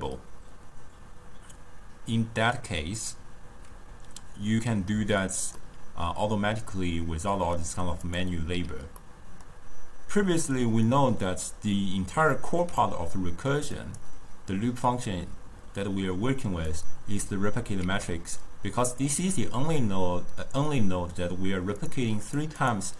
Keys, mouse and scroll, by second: 5.6-8.1 middle drag, 8.1 click, 9.0-11.4 middle drag, 11.4 click, 11.8-13.8 middle drag, 13.8 click, 16.7 click, 18.3 shift+d, 21.9 drag, 22.3 click, 22.7 click.